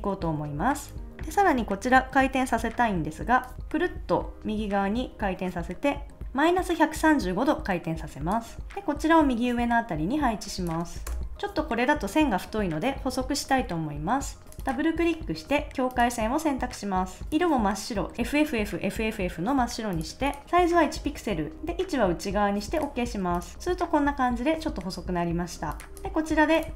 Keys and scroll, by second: 11.0 Return, 25.9 super+s.